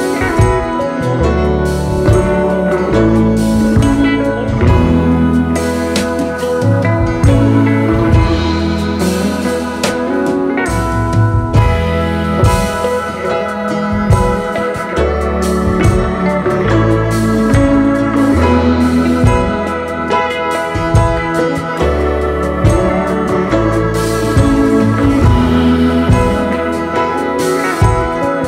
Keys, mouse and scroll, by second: 0.1-3.1 scroll down 1, 3.4-7.7 scroll down 38, 7.9-8.2 scroll down 1, 8.6-9.5 alt+scroll down 2, 9.5-10.1 space, 17.1-18.1 alt+scroll up 1, 19.4-20.7 alt+scroll down 3, 22.9 ctrl+a, 23.7 typing, 24.2 Return, 26.2-26.7 alt+scroll down 3.